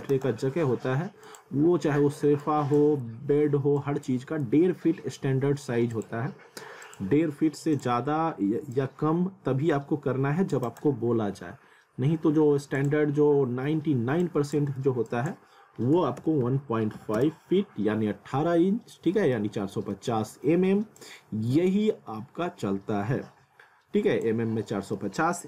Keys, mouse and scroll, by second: 0.1 right click, 1.3 click, 3.1 z, 3.8 click, 4.5 z, 5.9 click, 10.7 right click, 12.8 click, 14.8 ctrl+z, 15.1 click, 16.9 ', 17.2 Return, 18.7-19.2 scroll up 1, 19.2 middle click, 19.6 scroll down 1, 19.9 middle click, 21.0 click, 24.6 middle click.